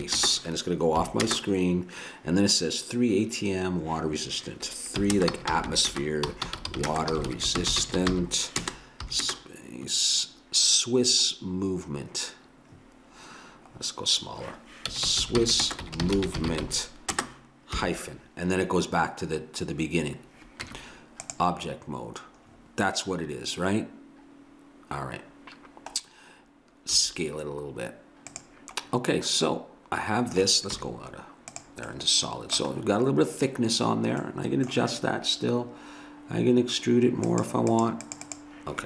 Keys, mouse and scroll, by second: 0.0-1.2 typing, 5.0-9.3 typing, 14.9-17.8 typing, 20.7 Tab, 27.0 s, 29.5-31.3 middle drag, 30.7 z, 31.6 z, 31.9 middle click, 37.3-38.8 drag.